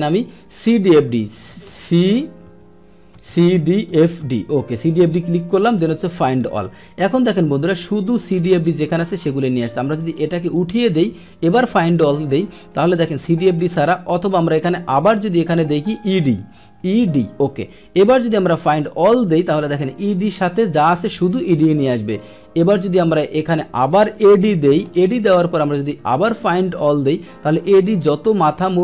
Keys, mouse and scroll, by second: 1.6 BackSpace, 1.9 Caps_Lock, 2.6 Caps_Lock, 3.1 BackSpace, 5.0 Caps_Lock, 6.1 click, 10.0 click, 10.4 click, 11.4 click, 12.4-14.9 middle drag, 14.9 click, 18.7 click, 19.7-23.5 middle drag, 23.5 click, 26.3 click.